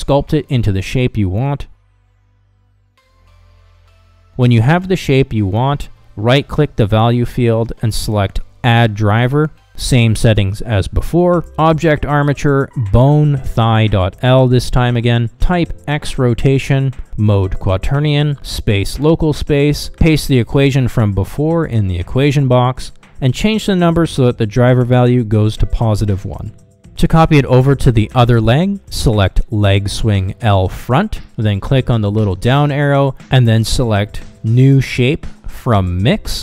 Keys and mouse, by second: 0.7 click, 1.6 middle click, 2.7 middle click, 3.0 shift+click, 4.1-5.5 shift+drag, 5.7 shift+click, 5.8 middle click, 6.0 middle click, 6.2 middle click, 6.7 middle click, 7.3 middle click, 10.1-29.1 right drag, 32.3 click, 33.2-36.4 drag.